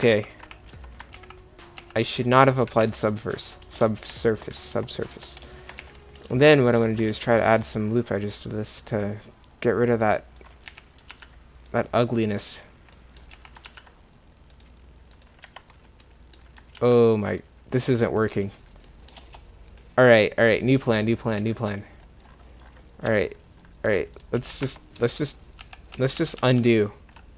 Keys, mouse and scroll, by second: 0.1 ctrl+z, 0.7 Tab, 1.1 ctrl+z, 1.8 ctrl+z, 2.8 Tab, 4.8 Tab, 5.1 Tab, 6.0 a, 7.1 ctrl+r, 10.7 a, 11.1 ctrl+r, 13.4 a, 13.6 ctrl+r, 15.4 Escape, 16.8 ctrl+r, 17.9 click, 18.1 middle click, 23.3 middle click, 24.4 ctrl+z, 24.7 Tab, 25.6 ctrl+z, 25.9 ctrl+z, 26.2 ctrl+z, 26.4 ctrl+z, 26.6 ctrl+z.